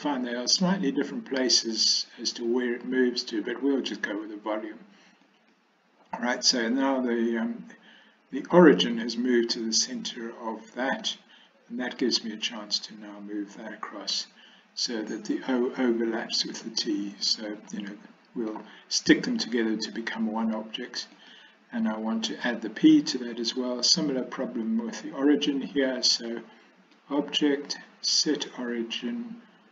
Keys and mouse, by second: 10.2-11.1 middle drag, 12.7-17.3 drag, 17.8 middle click, 21.2 click, 27.2-29.7 drag.